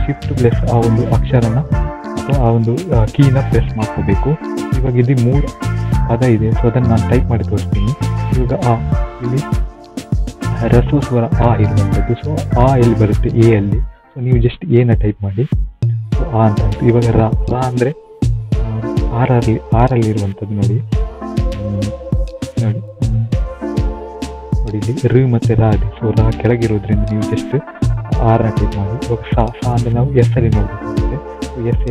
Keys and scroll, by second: 15.3-17.1 typing, 28.8 typing.